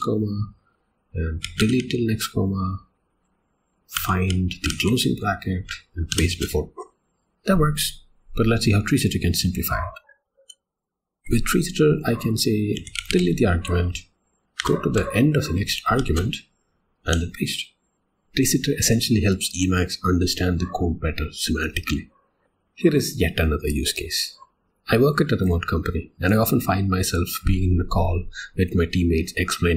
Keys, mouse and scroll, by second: 1.8 ,, 4.6 ), 6.1 shift+p, 10.1-11.2 typing, 15.9 a, 17.1 p, 22.4 click.